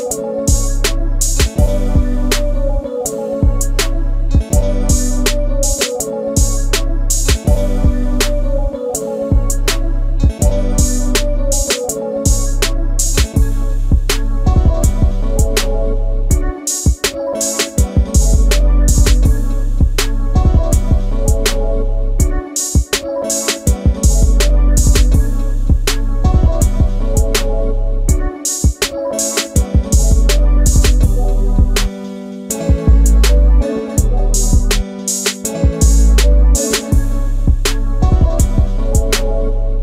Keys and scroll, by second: 2.2 q, 7.4 space, 26.5 space, 34.8 e.